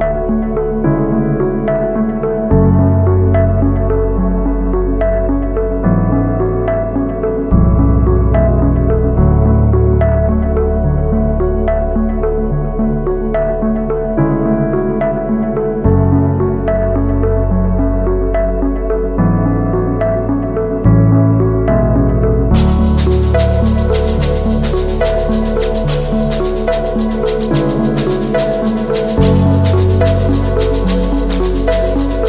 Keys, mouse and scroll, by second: 0.4-1.2 typing, 4.1-4.7 typing, 6.1 typing, 9.7 typing, 13.3 typing, 13.5 ctrl+=, 13.9 ctrl+-, 18.5 double click, 20.7 ctrl+-, 27.5 double click, 29.1 ctrl+=, 29.4 ctrl+=, 31.2 double click.